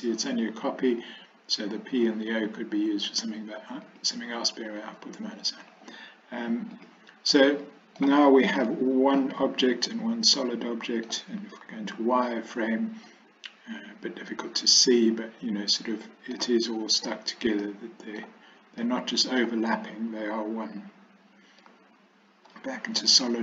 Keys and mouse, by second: 3.1 click, 3.9 click, 7.4-8.1 middle drag, 8.7-9.2 shift+middle drag, 9.9-11.1 middle drag, 11.7 z, 13.1-16.4 middle drag, 17.7-18.3 middle drag, 18.9-19.5 middle drag, 21.8 z, 23.3-23.4 middle drag.